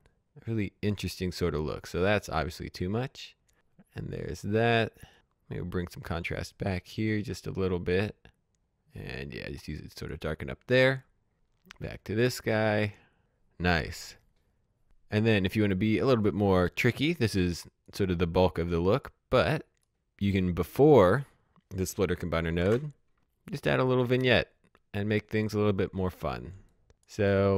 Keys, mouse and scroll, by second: 0.3 click, 4.7-7.6 drag, 11.9-13.1 drag, 15.9-16.9 drag, 22.2 alt+Num_Lock, 22.3 s, 22.8 click, 24.2-24.8 scroll down 1, 24.8 click, 25.2-25.9 scroll down 1, 25.9 click.